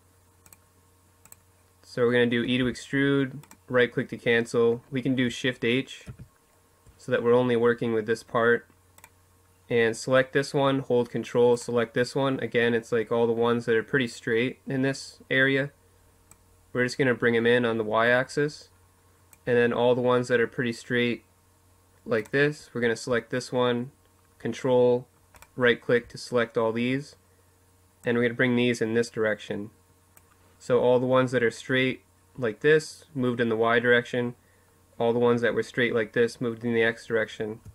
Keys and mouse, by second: 1.3 e, 2.2-4.1 drag, 4.8 shift+h, 7.7-9.5 right drag, 10.2-12.2 right drag, 15.0-16.8 drag, 20.9-25.8 drag, 26.8-28.5 drag, 36.6-37.7 middle drag.